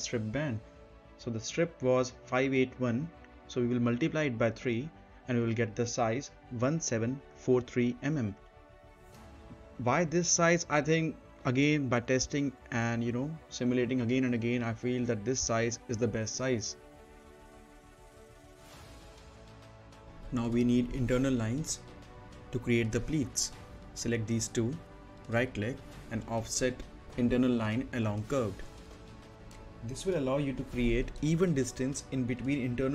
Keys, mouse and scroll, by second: 0.1 middle click, 0.9 click, 5.5 click, 6.1 right click, 7.5 click, 8.9-10.9 typing, 11.7 click, 14.3 scroll up 1, 14.6 middle click, 15.9 middle click, 16.0 click, 16.4 right click, 17.6 click, 17.7-19.2 typing, 19.1 click, 20.1 scroll up 1, 20.3 middle click, 22.6 click, 24.7 right click, 28.1-32.9 drag.